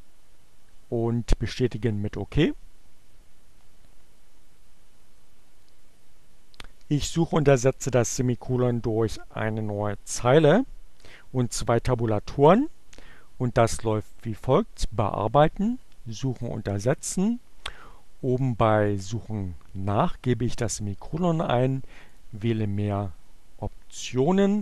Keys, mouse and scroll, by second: 1.3 click, 12.4 click, 13.8 click, 15.3 click, 18.2 click, 21.6 click, 21.9 click, 23.8 n, 24.4 t.